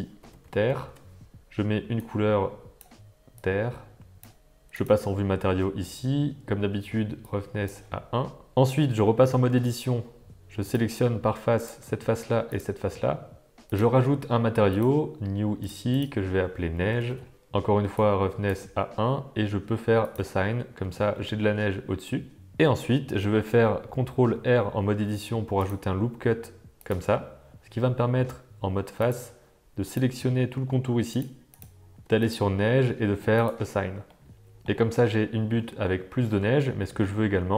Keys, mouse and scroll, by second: 0.6 r, 4.8 click, 7.2 click, 9.0 Tab, 10.6 click, 12.5 shift+click, 13.7 click, 14.7 click, 15.6-17.3 drag, 18.0 click, 20.0 click, 20.7 Tab, 21.1-22.5 middle drag, 22.5 Tab, 24.3 ctrl+r, 29.0 click, 29.8 click, 31.2 shift+click, 32.2 click, 33.5 click, 34.1 middle click, 34.9 Tab, 35.5 middle drag, 36.8 middle click, 37.2 Tab.